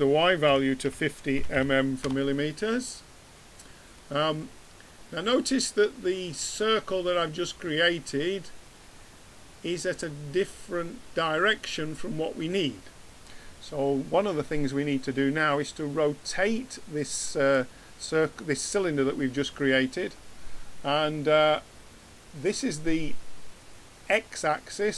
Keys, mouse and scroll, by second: 1.5 m, 3.9-5.0 middle drag, 16.2 click.